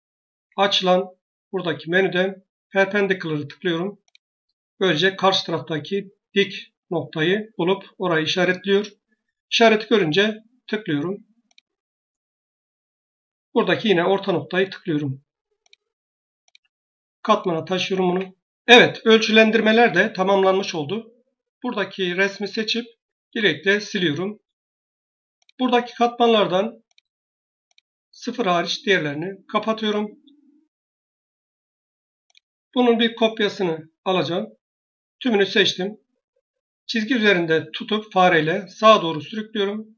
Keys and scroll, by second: 17.9 Escape, 23.1 Delete.